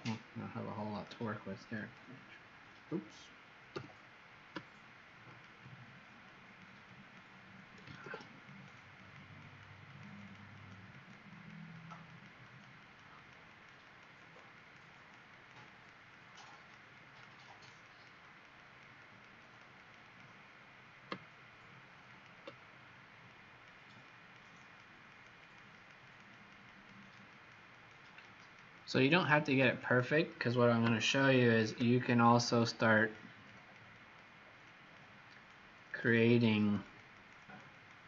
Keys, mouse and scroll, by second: 0.9 alt+click, 1.7 click, 3.7 s, 5.3 alt+click, 6.2 click, 6.8 click, 8.0 ctrl+d, 8.4 click, 9.0 click, 9.4 click, 9.8 click, 10.1 click, 10.5 click, 10.9 click, 11.2 click, 11.7 click, 12.1 click, 12.4 click, 12.8 click, 13.1 click, 13.4 click, 13.8 click, 14.1 click, 14.5 click, 14.8 click, 15.3 click, 15.7 click, 16.1 click, 16.5 click, 16.9 click, 17.4 click, 17.8 click, 18.3 click, 18.5 click, 19.0 click, 19.4 click, 19.8 click, 20.0 click, 23.2 click, 24.6 click, 25.2 click, 25.5 click, 25.7 click, 26.1 click, 26.2 click, 26.7 click, 27.0 click, 27.3 click, 27.7 click, 28.1 click, 28.3 click, 28.7 click, 29.0 click, 29.5 click, 29.8 click, 31.5 alt+click, 32.3 click, 32.9 click, 33.4 click, 33.9 click, 34.6 click, 35.3 click, 35.8 click, 36.3 click, 36.6 click, 36.8 click, 37.1 click, 37.5 click, 37.7 click.